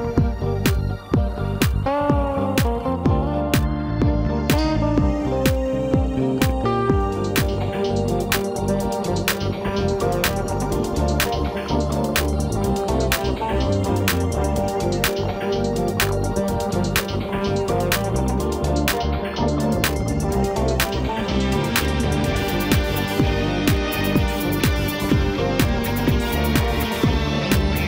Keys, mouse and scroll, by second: 4.8 shift+d, 8.7 scroll down 3, 8.9 middle click, 9.9-11.1 scroll up 1, 11.1 e, 14.9-17.0 middle drag, 17.0-20.0 drag, 21.3-22.7 drag, 22.7 scroll up 2, 23.8 i.